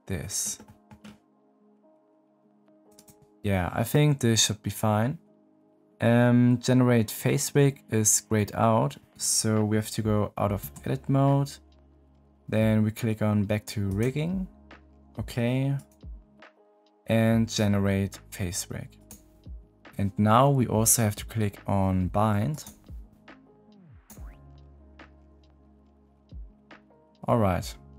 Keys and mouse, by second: 0.7 click, 1.8 click, 2.7 click, 2.9 click, 10.6 Tab, 13.8-15.8 drag, 18.9 click, 22.5-26.5 drag.